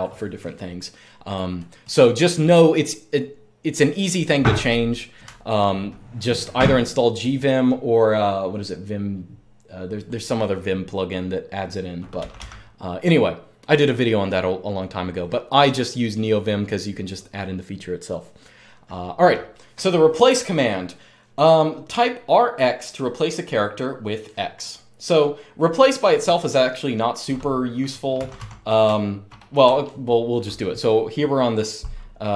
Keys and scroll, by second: 5.0-5.4 typing, 7.0 typing, 11.9 typing, 27.9-29.4 typing.